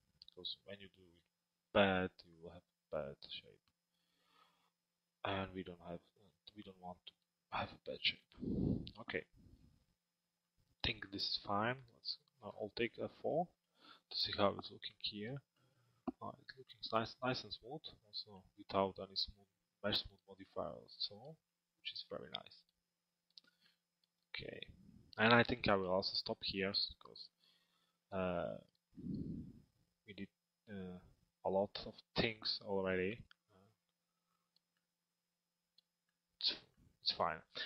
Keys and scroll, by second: 11.5 alt+x, 13.1 F4.